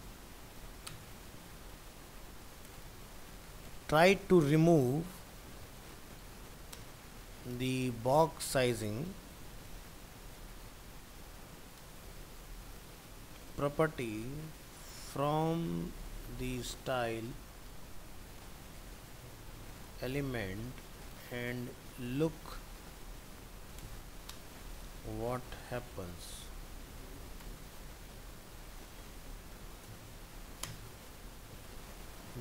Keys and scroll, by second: 0.0 ctrl+Right.